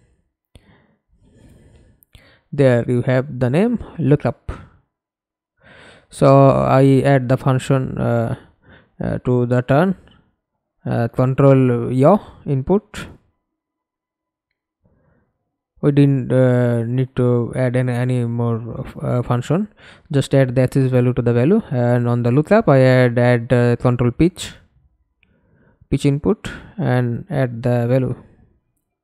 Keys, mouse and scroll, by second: 0.0-1.2 typing, 2.0 Up, 2.2 Up, 2.9 Up, 3.2 Return, 4.8 right click, 7.6 a, 8.2 d, 9.8-12.2 typing, 19.4 right click, 22.8-25.3 typing, 25.3 Return.